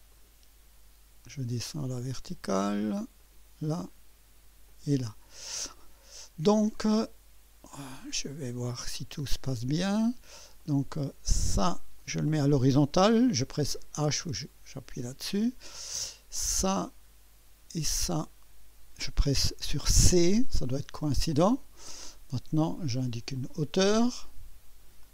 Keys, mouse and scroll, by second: 0.1 click, 3.2 click, 4.6 click, 5.4 right click, 5.9-6.8 scroll up 1, 6.8 right click, 7.7 scroll up 1, 8.1 right click, 9.0 right click, 10.0 right click, 10.6 right click, 12.0 click, 14.2 h, 16.5 click, 18.0 click, 19.9-20.6 typing, 21.7 scroll down 1, 23.3 click, 25.0 click.